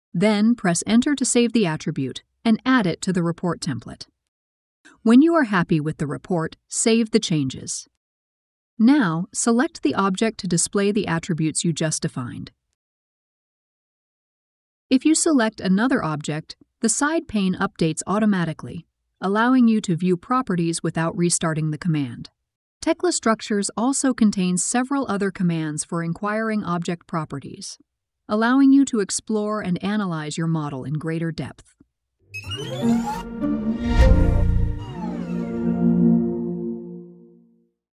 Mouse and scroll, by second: 9.8-11.6 drag.